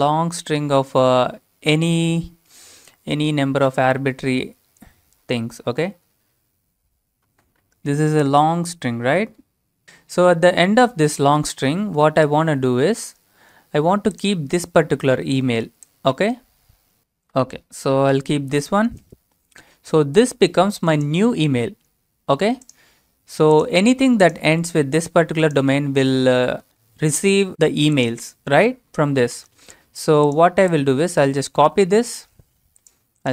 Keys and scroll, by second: 0.0-2.8 typing, 4.4-5.9 typing, 8.8-9.6 typing, 10.9-12.5 typing, 18.4 ctrl+v, 29.4 alt+Tab, 31.7 ctrl+c.